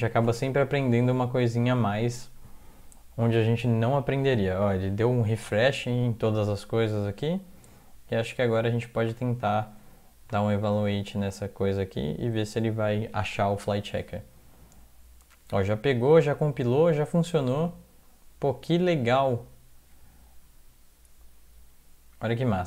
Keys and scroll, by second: 0.3 Tab, 1.2 super+Up, 10.8 ctrl+x, 11.1 ctrl+e.